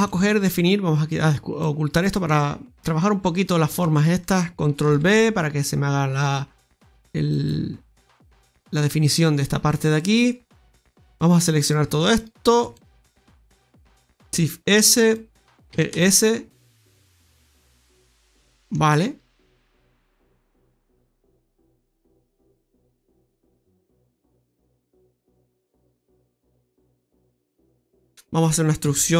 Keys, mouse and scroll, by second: 0.0 shift+middle click, 1.5 click, 4.3 alt+shift+right click, 6.5 ctrl+b, 7.6 scroll down 1, 7.9 middle click, 9.9 middle click, 10.8 middle click, 10.8-11.3 scroll down 2, 11.5 right click, 11.9 alt+shift+right click, 12.1 right click, 12.6 middle click, 14.1 shift+s, 15.7 e, 18.0 middle click, 21.5 s, 25.6 scroll down 3, 25.9 middle click, 28.8 e.